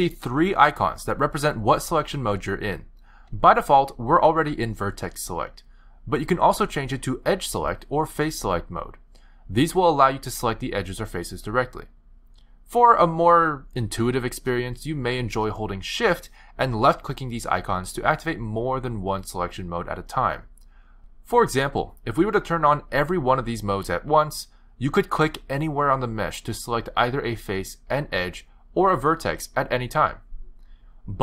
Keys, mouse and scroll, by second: 7.2 click, 8.3 click, 9.8 click, 10.5 click, 11.0 shift+click, 11.7 click, 12.3 click, 12.5 shift+click, 13.0 shift+click, 13.6 click, 15.0 shift+click, 15.7 click, 16.4 shift+click, 17.5 click, 18.6 click, 20.5 shift+click, 23.0 shift+click, 24.4 click, 25.5 click, 26.1 click, 26.8 click, 27.5 click, 28.2 click, 28.7 click, 29.3 click, 30.5 click.